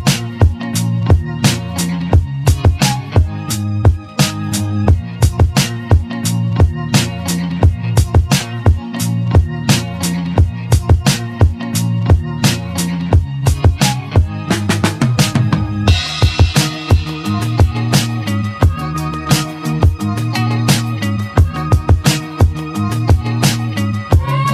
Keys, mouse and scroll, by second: 1.0 ctrl+z, 4.1 `, 9.6 y, 11.4 s, 16.6 s, 20.9 s.